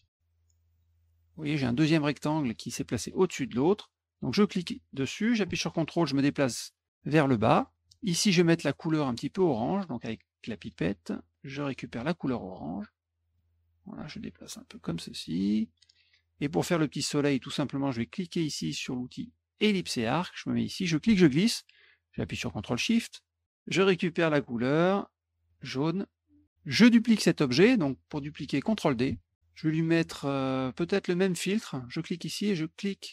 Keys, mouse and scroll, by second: 0.7 click, 4.1-7.7 drag, 10.6 click, 11.6 click, 13.3 click, 14.0-15.8 ctrl+drag, 19.7 click, 20.9-23.4 ctrl+drag, 24.5 click, 25.5 click, 29.1 ctrl+d, 31.5 click.